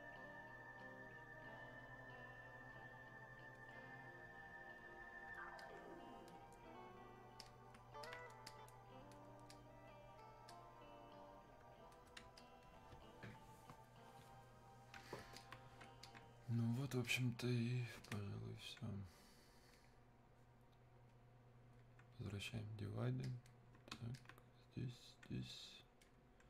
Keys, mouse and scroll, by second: 0.8-2.2 drag, 2.2 click, 3.7-5.6 drag, 5.6-7.4 alt+drag, 7.4 click, 8.1 alt+click, 8.5-12.4 drag, 12.4 alt+click, 15.2 alt+click, 15.4 alt+click, 17.1 click, 18.0 Escape, 18.1-21.1 drag, 21.1-23.3 drag, 23.3-26.4 alt+drag.